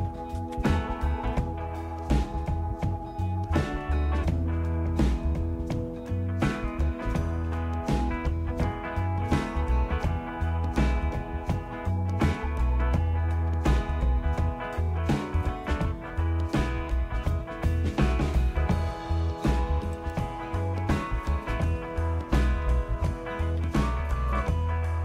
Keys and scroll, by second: 0.0-1.5 typing, 2.1 Return, 22.7 typing, 24.3-25.0 typing.